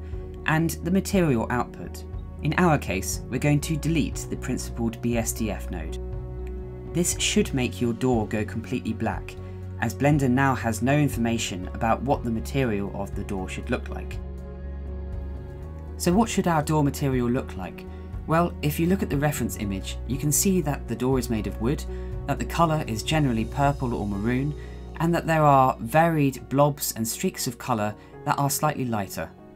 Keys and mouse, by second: 2.9-3.6 drag, 4.7 Delete, 7.3-10.3 drag, 8.8 o.